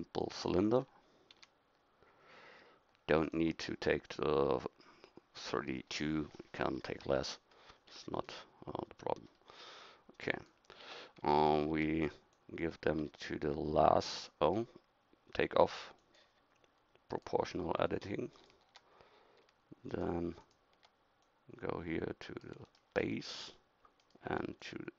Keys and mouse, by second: 0.8 middle click, 1.3 s, 5.9-10.5 middle drag, 10.8 Tab, 18.3-21.2 right drag, 21.2-22.4 middle drag, 22.9-24.0 middle drag, 24.0-24.9 right drag, 24.6-24.9 drag.